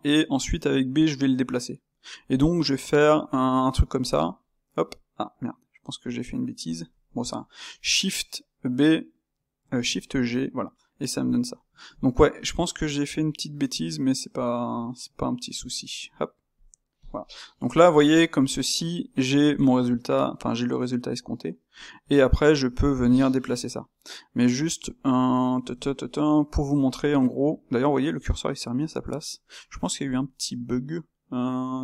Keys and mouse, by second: 10.2-15.1 middle drag, 17.1-21.6 middle drag, 21.6 click, 22.0-23.0 middle drag, 23.0 click, 23.5 g, 25.0-26.8 middle drag, 26.8 click, 27.2-30.0 middle drag, 30.0 click, 30.3-31.8 middle drag.